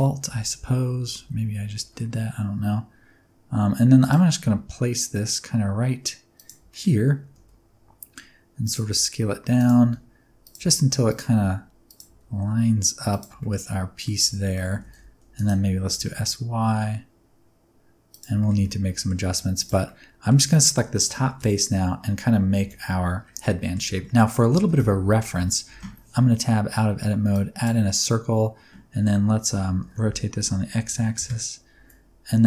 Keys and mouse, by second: 0.2 Tab, 1.1 alt+z, 1.7 r, 3.9 click, 4.3 g, 6.3 click, 6.7 click, 7.3 s, 8.6 click, 8.8-12.0 typing, 9.5 click, 10.4 click, 11.0 click, 11.8 click, 13.0 click, 13.3 shift+middle click, 13.7 middle click, 14.1 alt+z, 14.4 middle click, 14.7 s, 14.8 x, 15.3 click, 15.8 s, 16.1 y, 18.0 click, 18.4 shift+middle click, 18.6 middle click, 19.2 3, 19.5 click, 19.8 middle click, 21.1 KP_1, 21.2 KP_3, 22.5 KP_1, 23.5 shift+middle click, 24.1 shift+click, 24.6 shift+a, 25.3 Tab, 25.7 shift+a, 29.5 Tab, 29.8-31.7 typing, 31.1 KP_Enter.